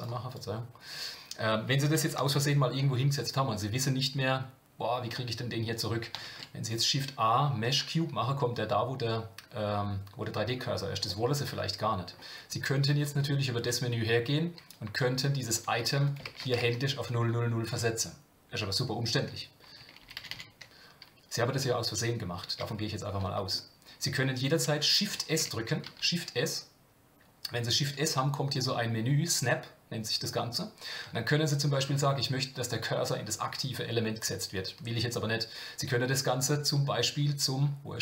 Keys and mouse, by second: 3.5-5.1 middle drag, 6.2 shift+a, 11.1-12.0 middle drag, 13.1 click, 14.8 click, 15.6-18.6 drag, 20.0-20.6 ctrl+z, 23.2 middle click, 25.1 shift+s.